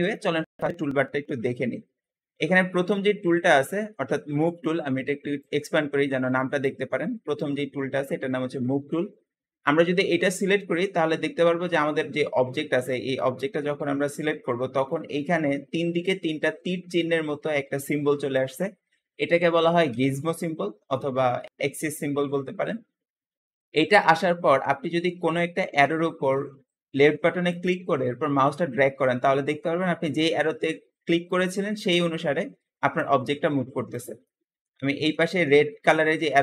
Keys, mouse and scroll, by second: 5.3-8.3 drag, 10.9-12.6 middle drag, 12.6-13.2 scroll up 1, 13.2-13.7 middle drag, 13.7-16.1 scroll up 2, 20.1-20.7 scroll down 2, 20.7-24.7 middle drag, 27.3 click, 34.1-35.0 middle drag, 35.0 scroll up 1.